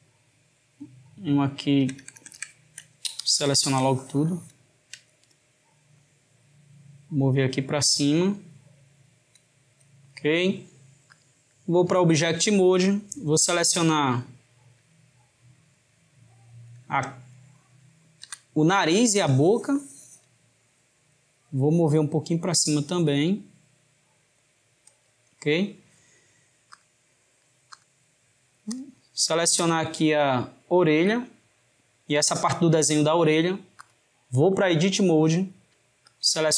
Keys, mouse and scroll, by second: 1.8 ctrl+KP_Add, 3.3 shift+click, 6.0 click, 11.1-13.2 drag, 14.1 click, 15.8 shift+click, 18.3 Tab, 19.3 click, 21.9 click, 26.8-28.8 drag, 30.3 shift+click, 33.9-36.3 drag.